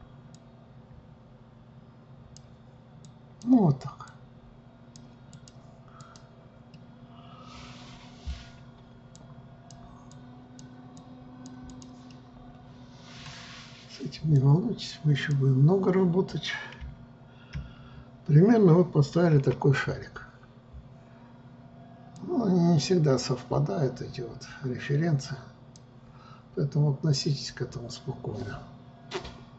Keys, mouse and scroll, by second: 6.9-9.4 middle drag, 9.4-12.3 drag, 12.3-14.5 middle drag, 14.5-17.0 drag, 17.0 KP_3, 22.3-25.4 drag.